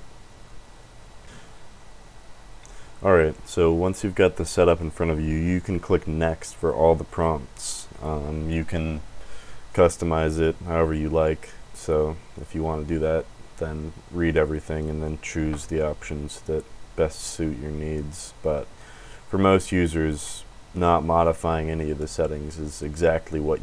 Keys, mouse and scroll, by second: 5.4 click, 7.0 click, 7.8 click, 20.1 click.